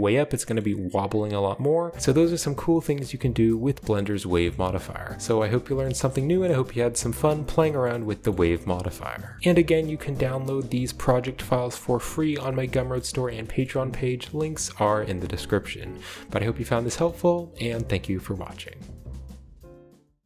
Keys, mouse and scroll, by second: 0.3-0.9 shift+scroll down 2, 1.6 click, 2.2-3.5 scroll up 2, 4.5 shift+middle click, 4.8 shift+middle click, 5.8 shift+middle drag, 6.0 shift+middle drag, 7.5 shift+middle click, 7.8 shift+middle click, 8.3 shift+middle click, 8.5 shift+middle click, 9.2 middle drag, 9.4-10.6 shift+middle drag, 9.4 scroll down 1, 10.6-11.0 typing, 12.2-13.4 middle drag, 12.2-12.9 scroll down 1, 13.6 middle click, 17.1-20.2 middle drag.